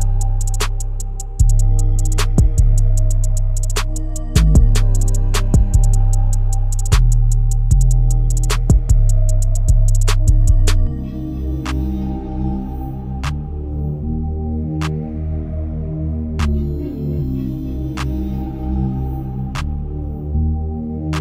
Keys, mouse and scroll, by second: 0.8 s, 3.7 KP_0, 4.5-5.0 scroll down 3, 5.0-9.0 shift+middle drag, 9.0-9.6 scroll down 3, 9.6 KP_7, 10.6 click, 12.8 shift+click, 13.8 g, 15.5 click, 16.1 r, 17.6 click, 18.2 r.